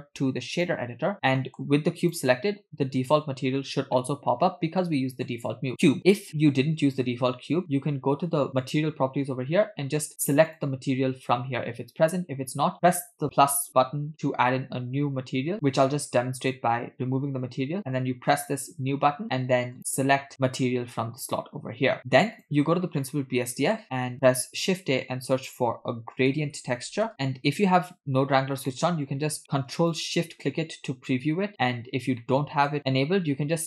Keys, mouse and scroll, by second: 1.4 middle click, 2.1 click, 4.0-5.4 middle drag, 5.5-6.0 scroll down 2, 6.3 scroll up 1, 8.7 click, 9.5-10.4 scroll up 1, 10.4 scroll up 6, 10.5 click, 16.4 click, 18.4-19.0 drag, 20.6 click, 22.0 ctrl+z, 22.4 click, 23.1 middle click, 24.5 shift+a, 28.7 middle click, 30.2 ctrl+shift+click, 32.2 middle click.